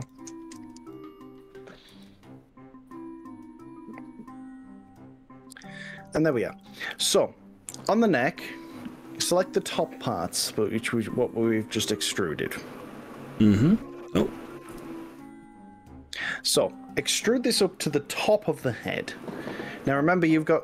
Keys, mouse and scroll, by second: 0.0 click, 0.6 click, 1.9 g, 7.0 click, 11.0 click, 11.4 click, 11.9 click, 13.3 middle click, 14.8 KP_1, 18.2 shift+click, 20.3 g.